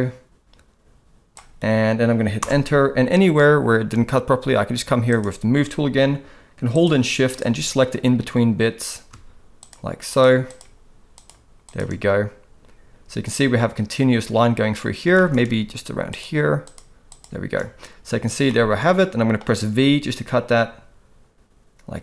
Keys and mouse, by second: 9.6 shift+click, 10.1 shift+click, 10.5 shift+click, 15.1 shift+middle click, 16.1 shift+click, 16.6 shift+click, 18.5 middle click, 19.8 v.